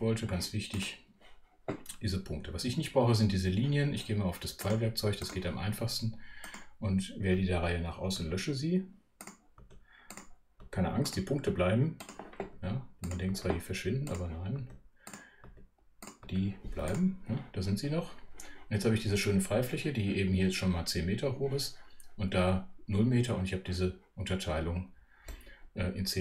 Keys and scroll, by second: 8.2 BackSpace, 9.6 BackSpace, 14.6 BackSpace.